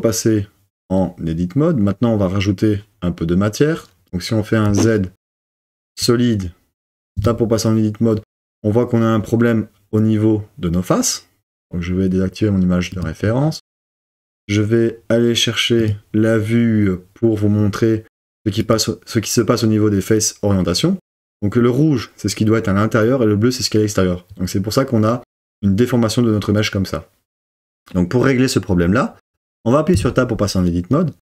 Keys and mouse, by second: 4.7 z, 7.2 Tab, 12.9 click, 15.9-20.8 drag, 29.9 Tab.